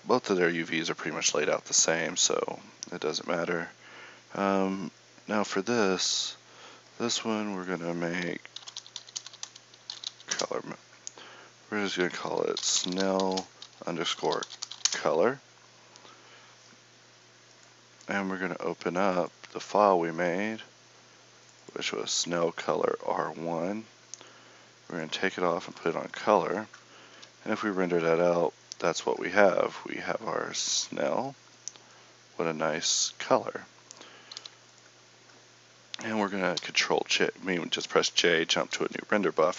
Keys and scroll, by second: 38.8 Escape.